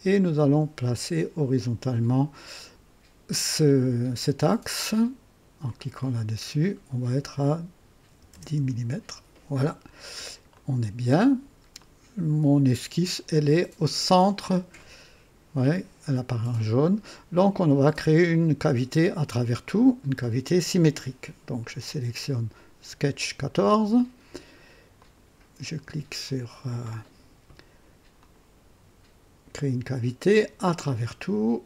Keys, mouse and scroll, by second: 1.3 click, 5.6 click, 8.0 KP_1, 8.3 KP_0, 8.5 Return, 10.5 click, 11.8-13.6 drag, 24.9 click, 28.1 click, 30.2 click.